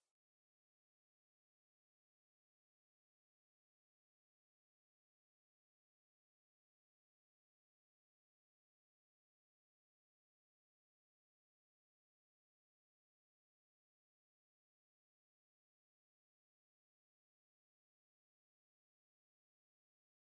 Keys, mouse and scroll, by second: 9.1 click, 16.8 alt+scroll down 1, 18.1 ctrl+s.